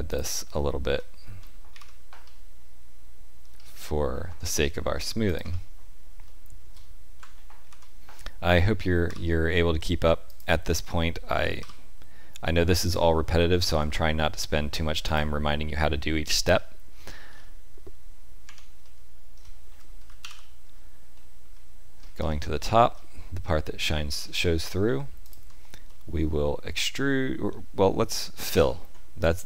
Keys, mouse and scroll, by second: 1.6 ctrl+r, 6.2 shift+middle click, 7.5 ctrl+r, 16.5 shift+middle click, 17.0-18.4 scroll down 3, 18.4 Tab, 18.4-18.8 scroll down 2, 18.8 middle click, 20.0 z, 21.1 shift+middle click, 21.9-22.3 scroll up 4, 22.5 shift+middle click, 23.4 Tab, 24.0-24.8 scroll up 4, 25.1 alt+click, 25.8 middle click, 28.4 f.